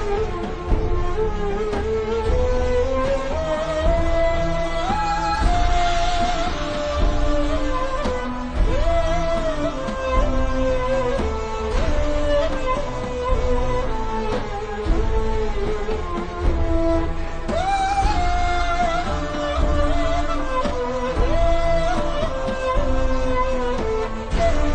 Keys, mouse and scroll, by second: 2.4 click, 5.8 scroll down 1, 6.1 z, 6.8 click, 11.3 click, 13.2 KP_1, 13.3 KP_Decimal, 13.6 KP_Enter, 22.1 click.